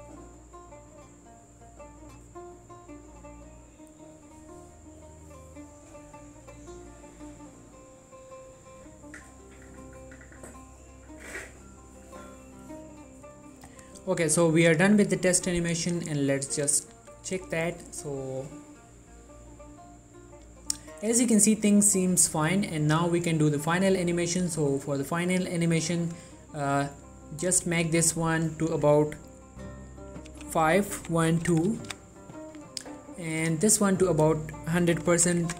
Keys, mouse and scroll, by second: 15.3 click, 23.2 click, 33.4 click.